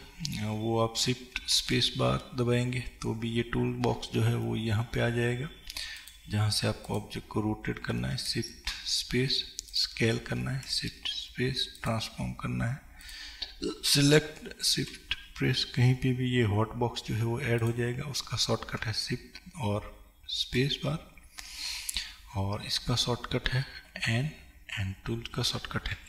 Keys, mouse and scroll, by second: 0.1-5.0 scroll down 2, 5.0-6.1 scroll down 1, 7.0 click, 9.8 shift+space, 13.1 click, 17.7 shift+space, 23.9 n, 25.9 t.